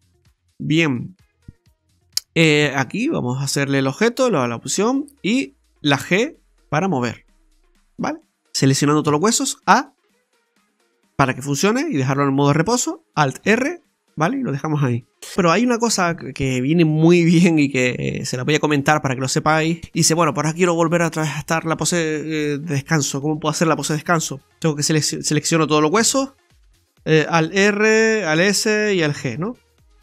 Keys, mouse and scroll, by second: 2.6 right click, 2.8 right click, 2.8 g, 5.3 right click, 5.9 right click, 6.0 g, 9.1 a, 13.5 alt+r, 15.9 scroll up 1, 16.2 scroll down 1, 16.4-17.0 scroll down 3, 17.0 middle click, 18.6 middle click, 19.1-19.5 scroll up 4, 19.7 shift+middle click, 19.8 middle click, 19.8 scroll down 2, 19.8 r, 20.0 scroll up 2, 20.3 shift+middle click, 21.0-21.6 scroll down 2, 21.6 scroll down 1, 24.8-25.4 scroll up 2, 25.2 middle click, 26.0 a, 27.4 alt+r, 28.4 alt+s, 29.2 alt+g.